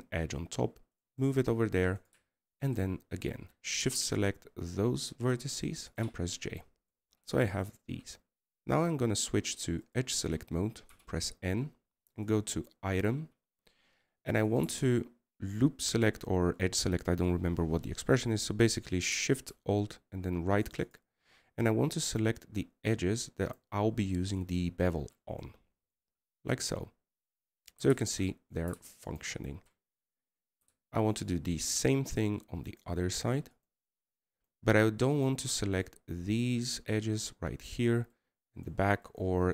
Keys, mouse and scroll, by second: 6.8 right click, 22.4 Right, 22.6 Right, 23.8 Right, 25.2 Right, 26.2 Right, 28.3 scroll down 1, 30.9 Right, 32.9 Right, 34.4 Right, 35.3 Right, 36.1 Right, 36.9 Right.